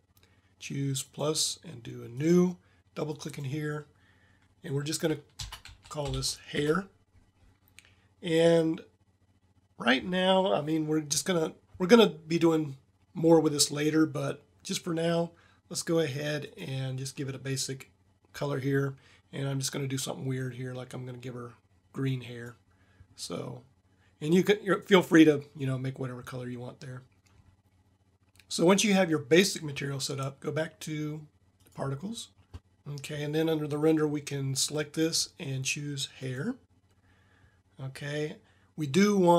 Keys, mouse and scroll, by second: 1.2-5.2 drag, 16.5-18.0 drag.